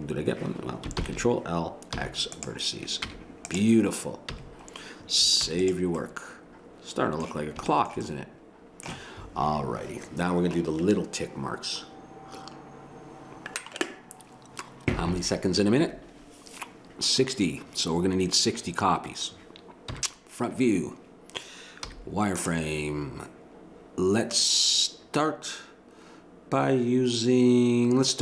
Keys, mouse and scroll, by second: 1.0 ctrl+l, 2.0 x, 3.1 Tab, 4.3 a, 5.4 ctrl+s, 6.5-12.8 middle drag, 19.9 KP_1, 21.8 z, 24.6 middle click, 28.1-28.2 right drag.